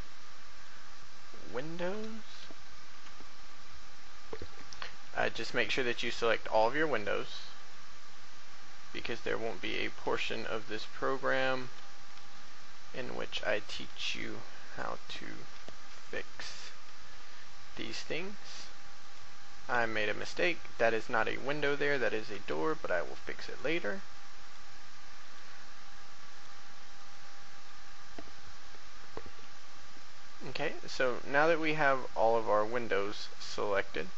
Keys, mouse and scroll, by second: 1.8 7, 3.2 shift+middle click, 4.4 shift+right click, 5.1 shift+middle click, 6.5 shift+right click, 7.1 shift+middle click, 9.4 shift+right click, 10.4 shift+middle click, 11.6 shift+middle click, 13.9 right click, 16.3 ctrl+z, 19.0 shift+right click, 20.2 shift+right click, 21.1 middle click, 21.9 middle click, 24.4 shift+right click, 25.2 shift+right click, 26.2 shift+right click, 27.0 shift+middle click, 28.4 shift+middle click, 29.4 shift+middle click, 30.7 shift+middle click, 33.4 shift+middle click.